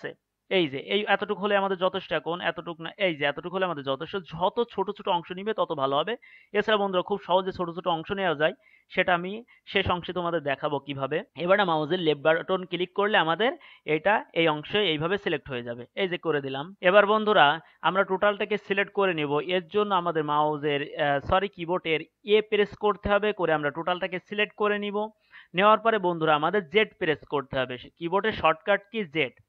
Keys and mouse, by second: 16.8-19.8 middle drag, 19.8 a, 22.6 a.